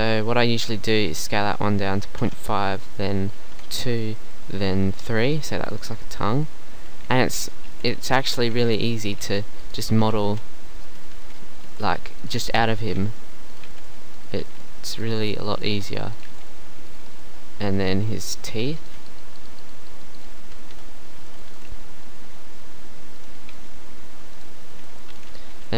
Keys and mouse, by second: 1.0 s, 2.8 s, 4.4 s, 5.8 right click, 6.3 KP_1, 7.7 g, 9.2 g, 9.8 middle click, 10.1 KP_7, 10.1 KP_8, 10.3 KP_7, 11.7-16.3 typing, 18.8 right click, 19.7-20.8 right drag, 20.7 KP_1, 21.5 g, 23.5 shift+d, 25.1 b.